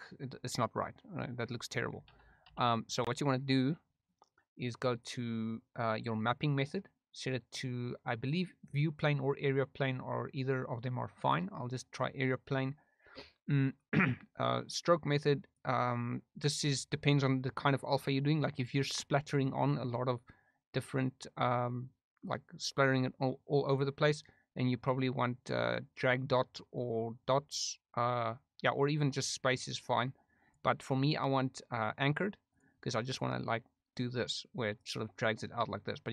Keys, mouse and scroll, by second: 1.0 click, 2.1 ctrl+z, 3.4 ctrl+z, 5.0-11.3 drag, 15.5 click, 24.8-29.2 drag, 30.4-32.6 drag, 34.0 click.